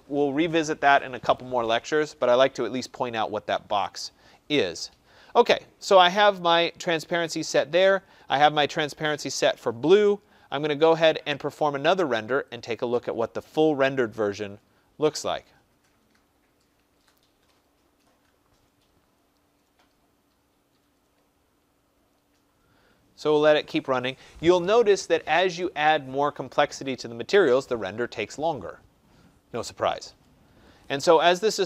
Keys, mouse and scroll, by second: 12.6 click.